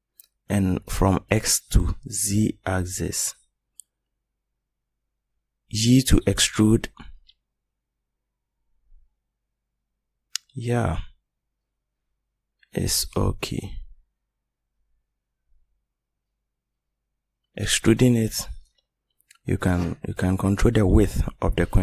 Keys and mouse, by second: 3.2 e, 7.7-9.0 middle drag, 13.4 middle click.